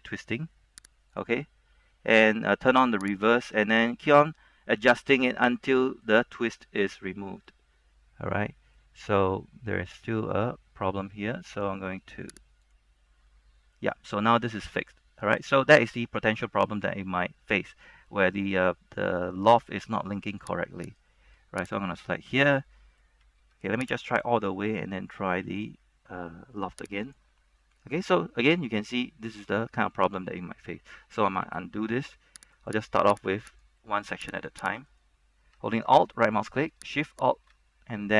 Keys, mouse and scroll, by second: 4.3-9.7 middle drag, 12.7 click, 13.4-16.6 middle drag, 16.6 scroll down 1, 16.8 middle click, 21.8 alt+shift+right click, 22.1 alt+shift+right click, 22.8 middle click, 23.7-24.0 scroll down 1, 24.2 alt+shift+right click, 25.5 w, 27.2 click, 27.7-31.0 middle drag, 31.6 ctrl+z, 32.7 alt+right click, 33.7 right click, 33.9 middle click, 34.5 right click, 34.9 alt+right click, 37.3 alt+shift+right click.